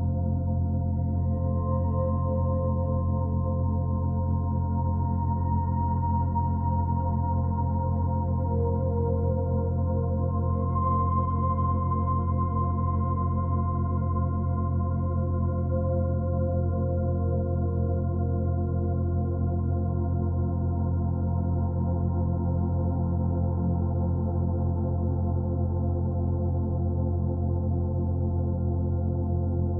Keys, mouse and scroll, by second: 0.1 click, 0.3 g, 1.4 click, 2.3 g, 3.5 click, 5.5 click, 5.7 g, 6.8 a, 7.1 middle click, 7.5-8.9 scroll down 1, 8.9-11.8 middle drag, 11.8 scroll up 1, 12.1-13.5 middle drag, 13.5 Tab, 13.9 3, 14.3 Tab, 14.6 3, 14.8 click, 15.4 shift+middle click, 15.6-16.2 scroll up 7, 16.2 ctrl+r, 19.1 ctrl+click, 20.7 right click, 21.0-21.5 scroll down 4, 21.6 ctrl+z, 21.9 ctrl+r, 23.4 ctrl+r, 25.6 3, 25.8 click, 26.2 shift+click, 26.6 shift+middle click, 27.1 shift+click, 27.4 shift+click, 27.9 shift+click, 28.2 shift+click, 28.8 click, 29.5 click.